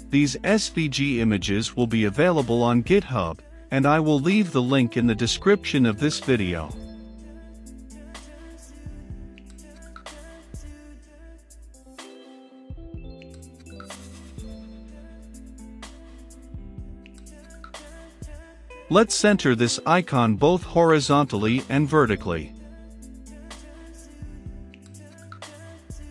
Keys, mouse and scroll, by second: 16.5-18.3 drag, 18.3 Return, 20.1-20.8 typing, 21.4 Return, 23.5-26.1 typing, 24.1 Return, 25.2 Return.